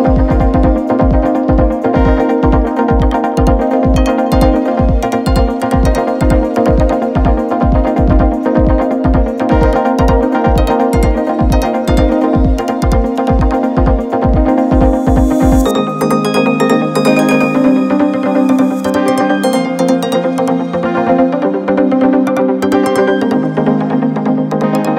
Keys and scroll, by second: 0.1 Left, 0.2 Left, 1.1 Up, 1.2 p, 1.4 Up.